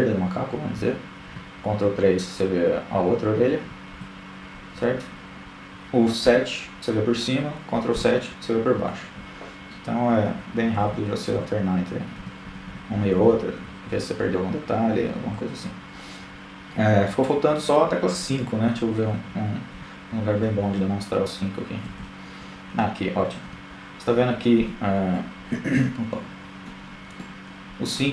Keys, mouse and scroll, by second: 0.6 KP_3, 1.5 ctrl+KP_3, 2.9 KP_7, 4.7 ctrl+KP_7, 7.0-11.9 typing, 15.8 KP_3, 16.5 KP_1, 18.6 KP_8, 18.8 KP_8, 20.1 KP_2, 25.1 middle click.